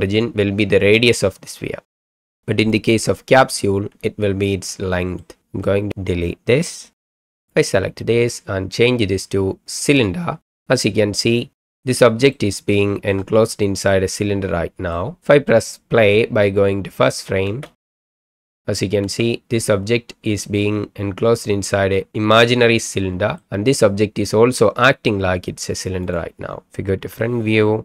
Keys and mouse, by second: 1.1-1.9 middle drag, 2.8-3.6 drag, 4.4-5.2 middle drag, 5.4 click, 7.0 Delete, 8.8-10.0 drag, 10.8-11.6 ctrl+drag, 11.6 middle click, 11.9-12.4 shift+middle drag, 12.6-13.2 shift+middle drag, 13.9-15.0 middle drag, 17.0 click, 17.4 space, 19.0 space, 20.9-23.5 middle drag, 26.0 click, 27.0 KP_1.